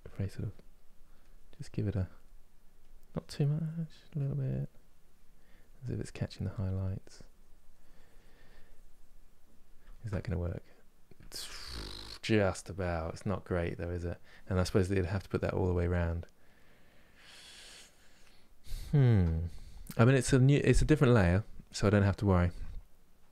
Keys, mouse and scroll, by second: 9.6-18.1 ctrl+middle drag, 18.6-23.3 ctrl+middle drag.